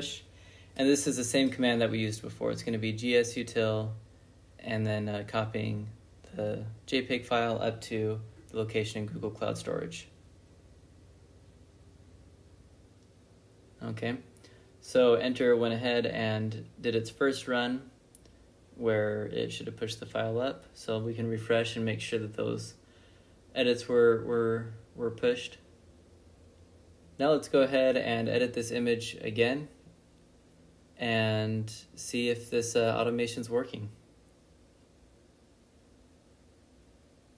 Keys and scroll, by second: 0.0-0.2 typing, 11.2 Return, 13.3 ctrl+n, 14.4 m, 34.8 ctrl+b, 34.9-36.4 typing.